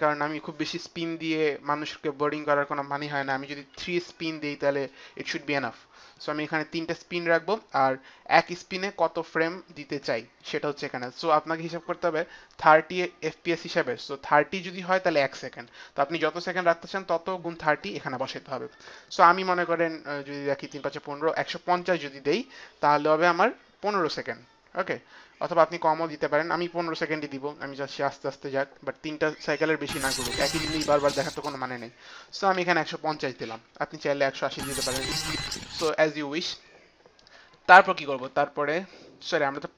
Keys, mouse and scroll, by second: 3.5 KP_3, 8.3 click, 32.4 KP_1, 32.5 KP_5, 32.6 KP_0.